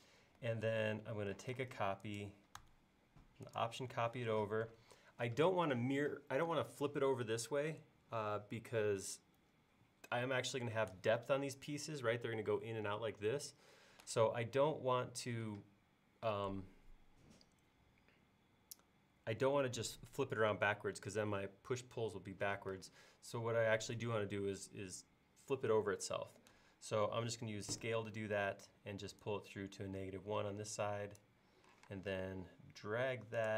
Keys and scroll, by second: 1.5 m, 27.8 s, 31.8 m.